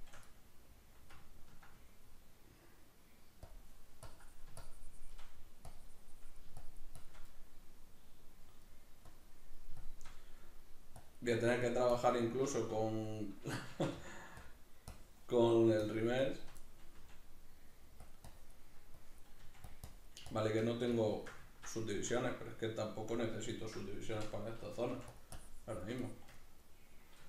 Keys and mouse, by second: 0.3-3.5 middle drag, 3.5 click, 4.6 shift+click, 5.3 middle click, 5.7-7.3 drag, 7.3-9.1 middle drag, 9.1-10.2 drag, 10.2 middle click, 11.0-12.2 drag, 12.2 middle click, 13.7 shift+c, 14.5 click, 15.8 shift+click, 16.6 middle click, 17.0 f, 18.1 click, 19.4 click, 19.4 f, 20.3-21.4 shift+drag, 21.4 ctrl+middle click, 24.2 i, 25.2 click, 26.0 shift+click, 26.4 middle click.